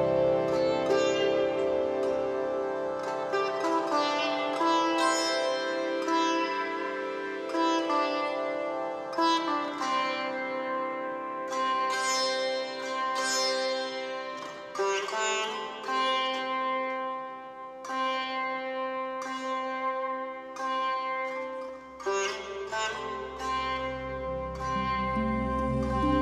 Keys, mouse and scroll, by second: 8.7 middle click, 8.8 shift+click, 9.5 shift+middle click, 9.6 shift+click, 10.0 shift+middle click, 10.5-12.1 shift+drag, 12.1 shift+middle click, 12.2 shift+click, 12.6 shift+middle click, 12.8-14.1 drag, 14.1 shift+middle click, 14.2-15.7 shift+drag, 15.7 shift+middle click, 15.8-16.8 shift+drag, 16.8 shift+middle click, 16.9 shift+click, 17.7 shift+middle click, 18.0-19.4 drag, 19.4 shift+middle click, 19.6-21.4 drag, 21.4 shift+middle click, 21.5-26.2 shift+drag.